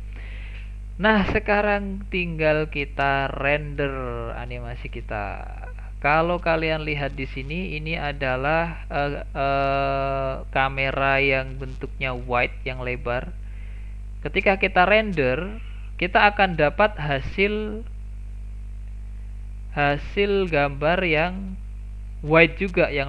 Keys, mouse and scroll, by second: 0.1 click, 7.7 click, 16.7-21.4 drag.